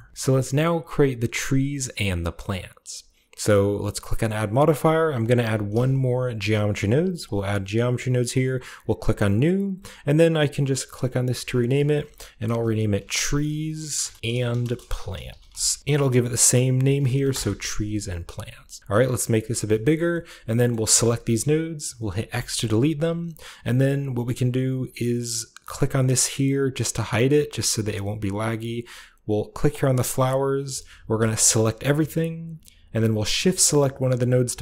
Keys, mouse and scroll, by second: 4.3 click, 5.3 typing, 7.1 click, 7.9 click, 8.2-9.9 drag, 11.1-13.0 drag, 12.3-16.2 typing, 15.8-18.8 ctrl+drag, 16.9 ctrl+v, 17.2 Return, 18.8 middle click, 19.2-20.4 drag, 19.4-21.0 scroll down 1, 19.6-22.2 middle drag, 20.8 a, 22.2 typing, 26.8-28.2 drag, 29.5-30.5 drag, 30.5-31.3 middle drag, 31.1 a, 31.3 a, 34.0 shift+right click.